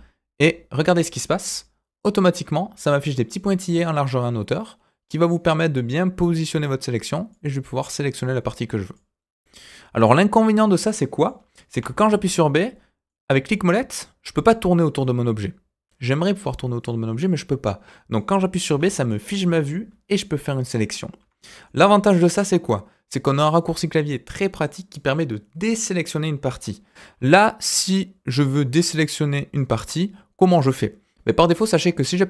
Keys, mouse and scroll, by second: 9.4 scroll down 2, 9.7-11.3 middle drag, 11.3-11.7 scroll up 1, 11.7 b, 16.8-18.2 middle drag, 18.6 b, 21.4 scroll down 1, 21.6-24.8 middle drag, 27.1 scroll up 2, 27.3-27.7 scroll down 2, 27.7-31.2 middle drag, 31.4-31.7 scroll up 2, 31.7 middle click, 32.1 b.